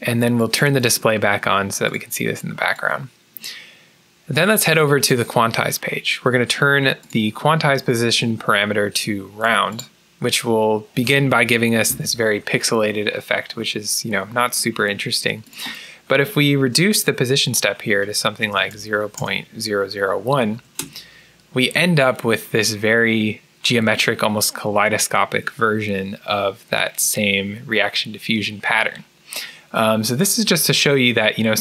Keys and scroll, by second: 18.1-20.4 typing, 20.7 Return, 21.9-22.9 typing.